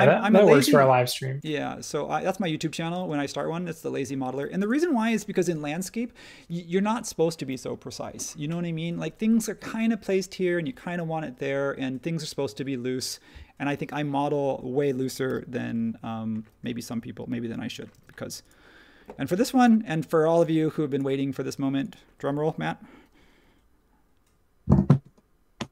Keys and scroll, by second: 2.9 space, 4.4 space, 15.0 typing, 17.9 space.